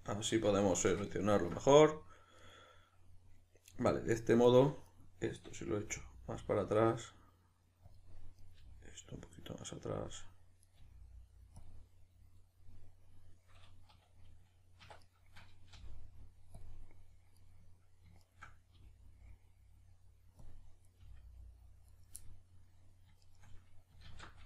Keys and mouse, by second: 0.3 z, 2.4 right click, 4.4 right click, 4.8 right click, 5.8 g, 7.9 click, 8.4 right click, 8.6 g, 10.1 click, 10.7 right click, 10.8 g, 11.7 click, 14.8 1, 15.0 right click, 15.7 g, 16.7 click, 17.4 right click, 18.2 shift+right click, 18.7 g, 20.5 click, 20.9 right click, 21.0 g, 22.0 right click, 22.2-23.2 middle drag, 23.2 shift+right click, 24.1 alt+q.